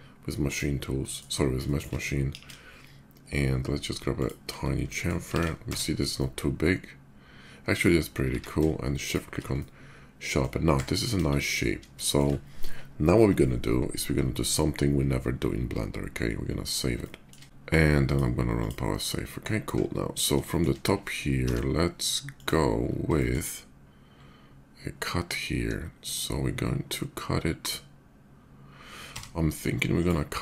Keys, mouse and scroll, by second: 0.1 alt+click, 0.8 alt+middle click, 1.4 shift+middle click, 2.0 ctrl+b, 3.1 middle click, 3.9 click, 4.5 shift+middle click, 5.1 alt+x, 5.4-5.9 middle drag, 5.9 Tab, 8.0 q, 8.8 click, 9.3-10.1 ctrl+shift+middle drag, 11.3 KP_5, 11.8 shift+middle drag, 16.8 shift+middle drag, 17.4 1, 17.8 click, 18.2 click, 18.9 middle drag, 20.2 shift+middle drag, 21.1 d, 22.0 click, 22.9 shift+middle click, 28.9 d, 29.7 click, 30.0 click.